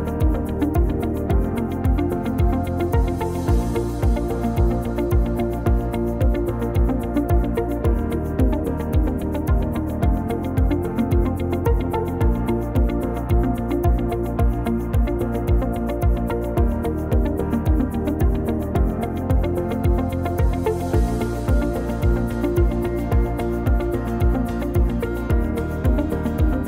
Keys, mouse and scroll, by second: 2.0 click, 2.8 click, 6.6 click, 7.5 click, 12.2 click, 12.5-12.8 scroll down 1, 12.8 scroll up 1, 13.3-13.6 scroll down 1, 13.8 Tab, 14.3 middle click, 15.1 scroll down 1, 15.3 middle click, 16.4 click, 16.7-17.3 scroll up 2, 19.0 s, 25.4 middle click, 25.9-26.6 scroll down 1.